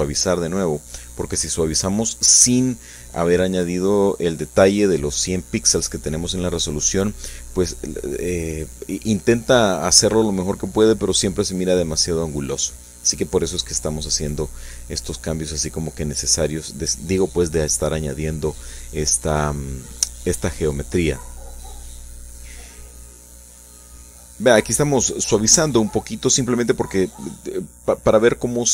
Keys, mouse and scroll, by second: 3.6-5.4 shift+middle drag, 5.8-8.6 shift+drag, 12.2-16.8 shift+drag, 17.6-21.2 drag, 21.4-22.6 shift+middle drag, 22.9-26.5 shift+drag, 26.6 shift+click, 27.3-28.3 shift+drag, 28.6-28.7 shift+drag.